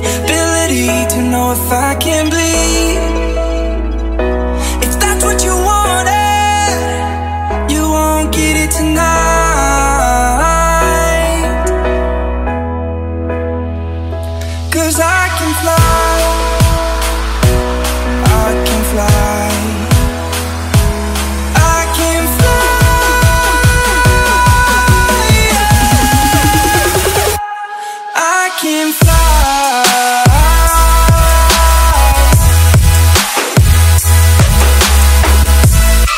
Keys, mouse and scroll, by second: 0.8 click, 9.1 click, 18.3 F10, 18.7 click, 21.7 scroll down 1, 22.9 click, 23.8 scroll up 1, 24.2 right click, 25.0 click, 25.7-28.2 typing, 30.3-31.3 typing, 31.5 Return, 32.3-35.7 drag, 35.7 F11, 35.8 F10.